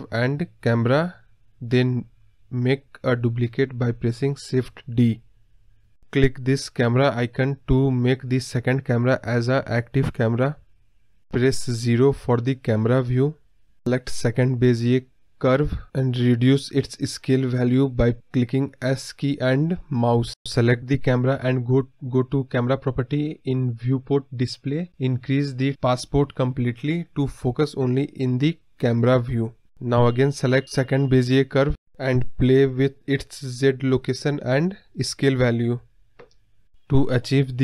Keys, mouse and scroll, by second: 0.3 scroll down 1, 0.3-2.9 middle drag, 2.9 click, 4.4 shift+d, 7.2 click, 9.5-11.7 drag, 11.7 KP_0, 13.5 click, 14.7-15.7 scroll up 4, 15.7 s, 20.0-22.0 drag, 23.9-25.6 drag, 28.9 click, 30.2-37.6 drag.